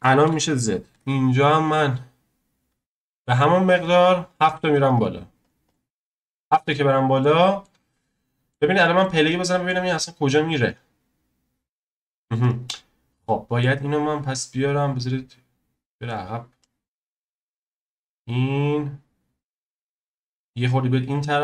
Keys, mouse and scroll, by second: 3.7 click, 4.2 click, 4.6-6.4 drag, 6.4-6.7 scroll down 1, 6.7-10.6 middle drag, 10.6 click, 12.7-13.2 scroll down 1, 13.2-13.8 middle drag, 13.8 drag, 14.9 click, 16.1-17.2 drag, 19.5-20.4 middle drag, 20.4 click.